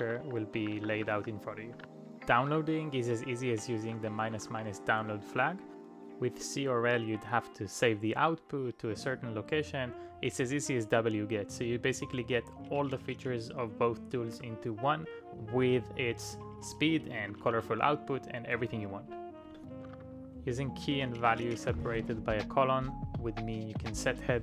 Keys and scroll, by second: 1.6-4.9 typing, 5.0 super+v, 5.9 Return, 14.2 typing, 17.2 5, 17.5 Tab, 18.5 Return, 19.2-22.1 typing, 24.1-24.4 typing.